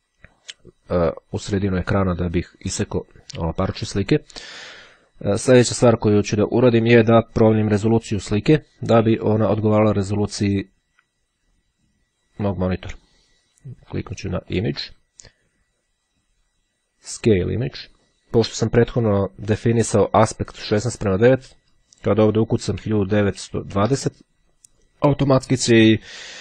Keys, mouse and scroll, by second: 12.1-15.0 drag, 17.0 click, 21.4 click, 21.9 KP_1, 23.7 KP_2, 23.8 KP_0, 25.5 click.